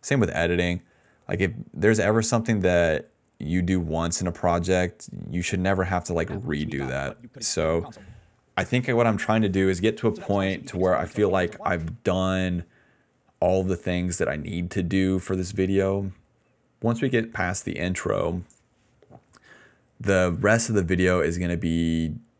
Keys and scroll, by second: 5.7-8.3 typing, 10.0 space, 10.4 s, 11.8-13.7 typing, 19.7 d, 20.9 ctrl+z.